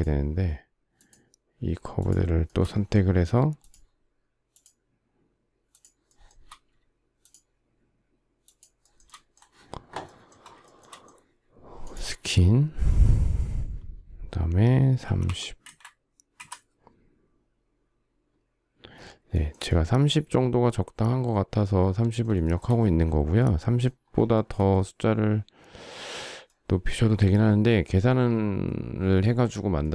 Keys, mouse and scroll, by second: 0.6 shift+click, 1.6 shift+click, 2.1 shift+middle click, 3.2 shift+click, 4.1 shift+click, 5.7 shift+middle click, 5.9 shift+double middle click, 6.8 shift+click, 8.0 shift+click, 8.4 shift+middle click, 8.6 shift+middle click, 10.3 shift+middle click, 14.4-15.4 typing, 18.9 shift+middle click, 22.0 shift+middle click, 23.9 shift+middle click.